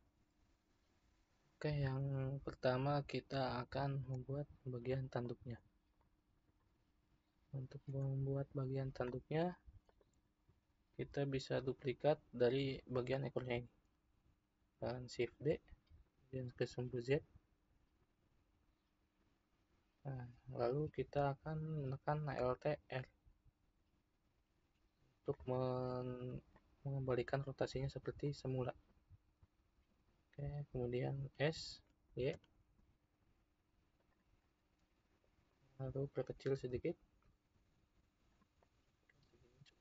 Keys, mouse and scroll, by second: 4.3-5.3 scroll up 2, 5.3-7.6 shift+middle drag, 7.6-9.1 scroll up 1, 9.1-9.9 shift+middle drag, 9.9 click, 15.2 shift+d, 23.1 alt+r, 24.5-25.4 scroll up 1, 25.4-31.4 shift+middle drag, 31.4 s, 34.4-36.8 middle drag, 36.8 s, 38.6-39.8 middle drag.